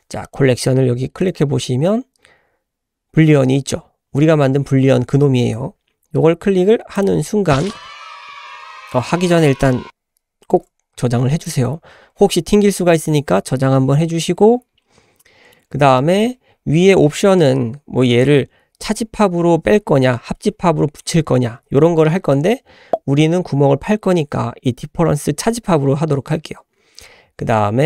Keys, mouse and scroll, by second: 0.3-8.9 drag, 8.9-10.1 scroll up 1, 10.5 ctrl+s, 14.4-15.2 scroll up 1, 15.2-15.5 middle drag, 15.6 scroll up 1, 16.0 shift+middle click, 22.8-26.1 scroll up 2.